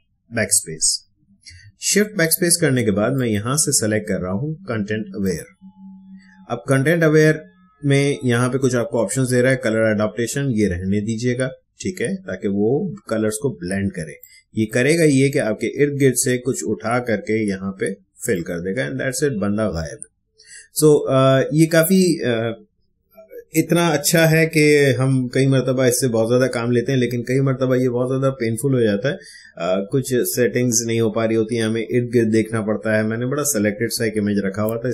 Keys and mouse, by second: 3.1 click, 14.2-17.1 drag, 18.3 click.